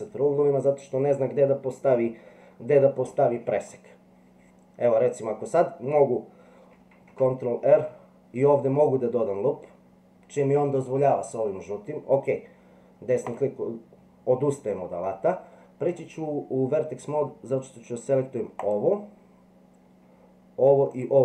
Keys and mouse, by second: 6.9 ctrl+r, 15.9 click.